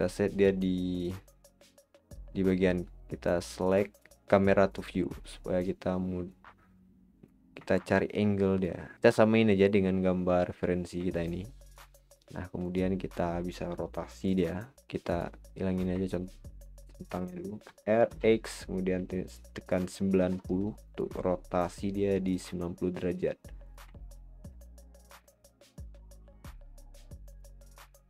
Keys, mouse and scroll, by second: 0.0 click, 3.3-4.8 drag, 6.3-7.7 drag, 7.7-8.9 middle drag, 8.9 scroll up 1, 8.9 middle click, 9.0-10.4 scroll down 4, 10.8 scroll up 1, 11.1-12.6 shift+middle drag, 12.6 click, 15.1 click, 16.0-17.6 middle drag, 17.6 r, 21.9 click, 24.0-25.6 middle drag, 25.6 click, 27.6-28.0 scroll up 5.